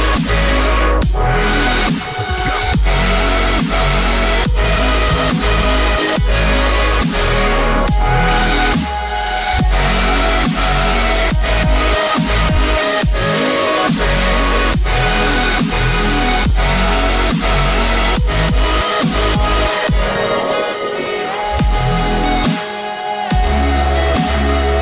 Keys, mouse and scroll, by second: 0.8 click, 13.9 click, 18.2 click, 18.3 ctrl+z, 18.7 ctrl+z, 19.6 click.